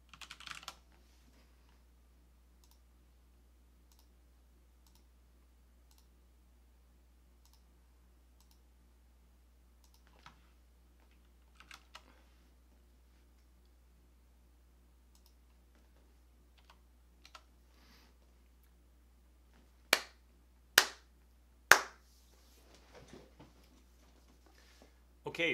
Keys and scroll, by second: 0.0-1.0 typing, 11.7 shift+4, 11.9 Return, 16.7 BackSpace, 17.3 Return.